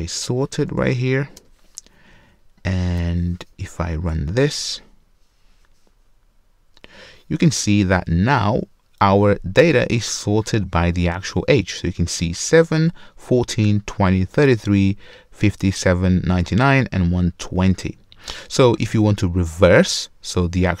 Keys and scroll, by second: 1.4 Return, 5.1 Return.